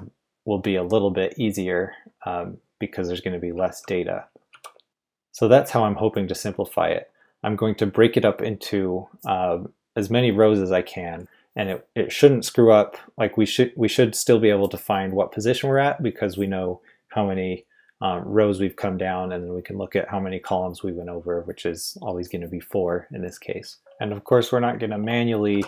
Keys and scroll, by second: 3.5-4.5 typing, 23.8 j, 25.5 typing.